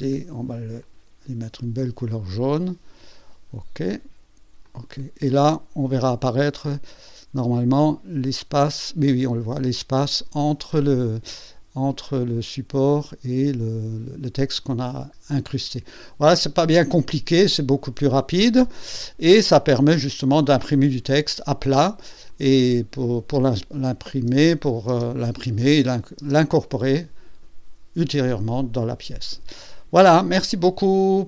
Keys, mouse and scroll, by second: 0.8 click, 2.0 click, 3.1 click, 3.5 click, 3.8 click, 4.6 click, 5.2 scroll up 2, 5.9-7.2 drag, 7.4 scroll up 1, 8.0 scroll down 1, 8.8-10.4 drag, 14.6-14.9 scroll down 2, 15.4 click, 16.4 click, 16.6-17.1 scroll down 2, 17.1-18.0 drag, 19.6 click, 20.0 click, 20.0 space, 20.8 space, 22.3 click, 23.8 click, 25.0 space, 25.9 click, 26.2 space, 30.5-31.0 drag.